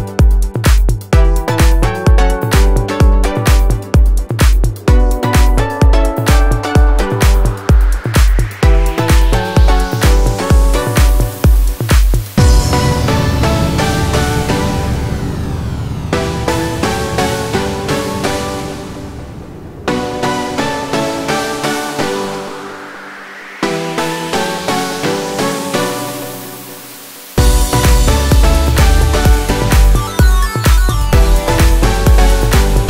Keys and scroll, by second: 3.1 Escape, 3.3 F2, 7.6 ctrl+r, 8.9 F3, 11.4 F4, 11.7 Escape, 13.8 shift+F2, 14.9 F3, 15.5 shift+Page_Up, 19.5 space, 23.7 F4, 24.0 Escape, 28.6 shift+Page_Up.